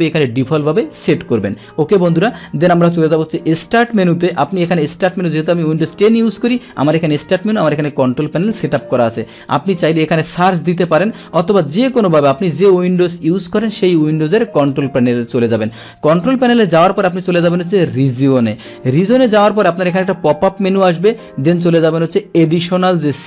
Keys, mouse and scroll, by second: 0.9 click, 3.9 click, 9.5 click, 14.6 click, 18.4 click, 20.3-21.1 drag.